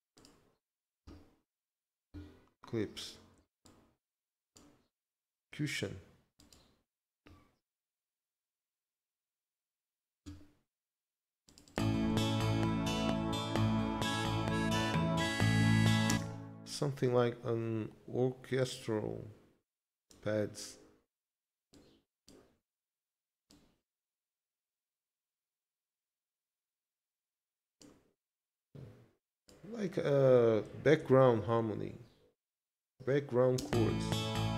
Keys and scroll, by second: 13.7 ctrl+Up, 16.1 space, 31.0 ctrl+s, 33.6 space.